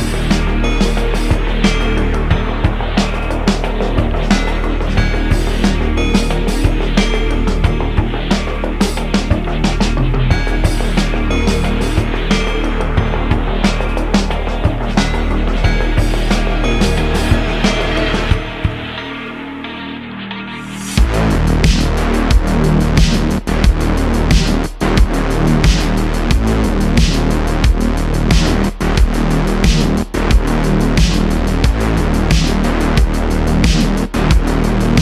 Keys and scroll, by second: 0.3 ., 8.5 `, 13.6 q, 16.8 Tab, 18.8 `, 21.6 Tab, 23.8 Tab, 24.7 `, 26.1 alt+z, 30.2 alt+z, 30.5 Tab.